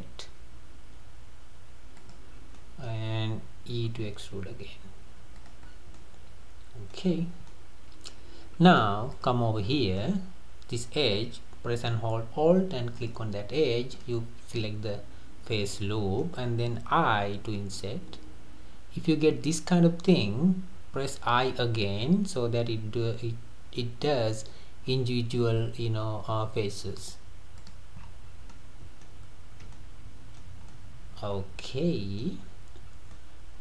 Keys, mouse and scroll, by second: 1.6 typing, 2.3 scroll down 3, 2.6-3.9 middle drag, 3.9 e, 5.7-6.0 scroll down 4, 6.0-7.2 middle drag, 7.2-7.5 scroll up 1, 7.5-9.1 middle drag, 9.1 click, 9.8-12.9 middle drag, 13.0 alt+click, 13.7 scroll down 3, 14.0-17.2 middle drag, 28.0-28.5 scroll up 6, 28.5-31.4 middle drag, 31.4 scroll up 1, 31.4 scroll down 3, 31.6-32.9 middle drag, 32.9 scroll down 2, 33.1-33.6 middle drag.